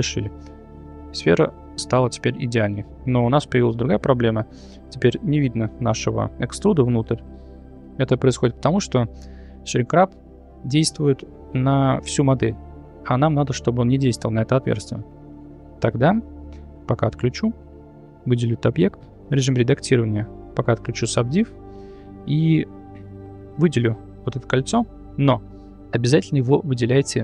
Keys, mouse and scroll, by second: 2.4 shift+middle drag, 3.3-3.7 middle drag, 7.1 middle click, 17.4 click, 19.4 Tab, 21.0 click, 22.1 2.